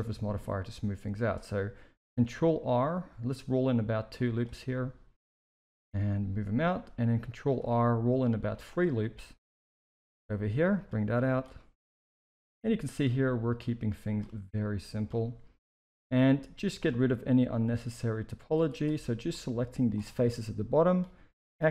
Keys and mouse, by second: 2.3 ctrl+r, 4.8-5.4 drag, 5.6 g, 7.3 ctrl+r, 9.1 click, 10.0 g, 11.1 click, 11.5 g, 12.6 click, 13.0 g, 14.0 click, 14.2 g, 15.6 shift+middle click, 16.7 click, 17.6-18.4 drag, 18.7 click, 18.9 c, 20.2-20.8 middle drag, 21.3 x.